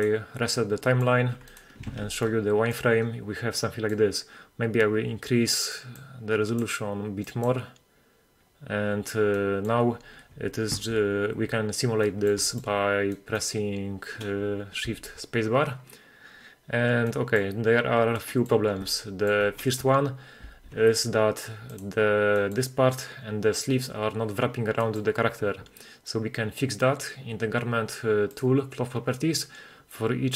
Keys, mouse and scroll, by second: 0.0 click, 0.9 middle click, 1.6 right click, 2.0 alt+q, 2.3-2.8 middle drag, 2.9-3.6 scroll up 1, 3.6-4.0 middle drag, 6.0 click, 7.3 click, 9.4-9.8 middle drag, 10.8 shift+1, 12.1 middle drag, 12.1 scroll up 1, 12.5 shift+middle click, 13.2 middle click, 14.9 shift+space, 17.2 middle click, 18.2-18.7 scroll down 2, 18.4-18.8 middle drag, 19.1 shift+middle click, 20.5 shift+space, 21.8 click, 22.4 middle click, 22.5 click, 24.8 middle click, 28.4 click.